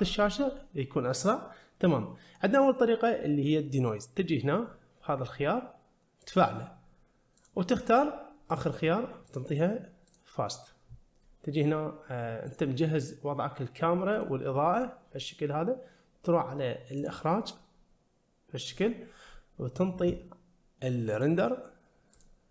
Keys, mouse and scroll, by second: 2.0 scroll down 1, 4.7-5.1 scroll up 1, 6.3 click, 7.4-8.6 drag, 9.3-10.2 drag, 12.8 click, 14.4 click, 17.2 click, 21.2-22.5 drag.